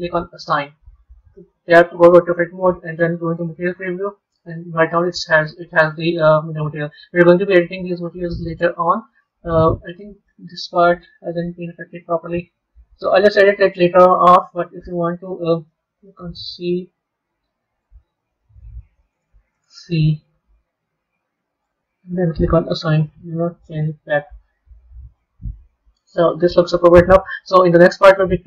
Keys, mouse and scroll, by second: 0.4 click, 1.5 Tab, 2.2 z, 4.4-7.3 middle drag, 7.4-10.4 middle drag, 10.8-12.3 scroll up 1, 12.3 b, 13.0 Tab, 14.6 b, 16.9-18.4 middle drag, 19.8-22.5 middle drag, 22.5 click, 24.6 Tab, 25.1-28.1 middle drag.